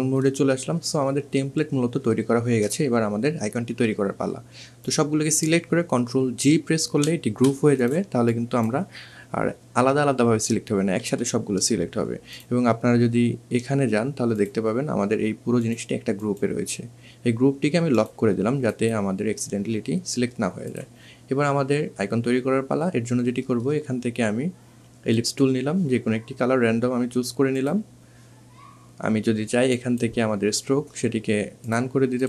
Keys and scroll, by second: 5.1 ctrl+g, 9.6 ctrl+z.